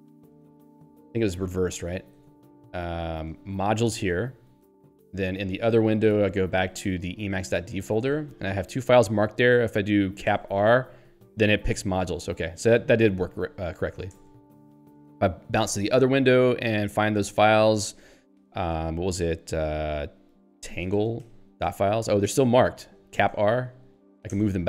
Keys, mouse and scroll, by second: 0.3 ctrl+n, 0.9 ctrl+g, 3.5 ctrl+n, 4.1 Return, 5.5 alt+o, 7.0-8.0 typing, 8.1 Return, 10.3 shift+r, 14.3 Return, 15.7 alt+o, 18.7 ctrl+s, 20.3-21.7 typing, 23.2 shift+r, 24.4 Return.